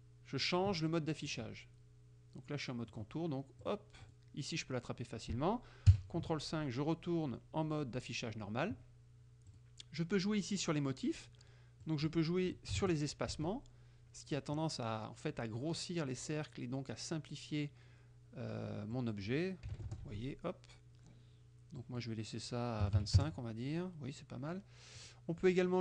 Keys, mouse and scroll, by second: 1.4 click, 3.0 click, 3.7 click, 4.1 click, 6.0 ctrl+KP_5, 7.3-8.5 middle drag, 9.5 click, 11.9 click, 12.8 KP_5, 13.3 KP_0, 13.4 Tab, 19.0 click, 19.8 KP_1, 20.1 Tab, 21.9 click, 22.9 KP_2, 23.0 KP_5, 23.3 KP_Enter, 25.0 click.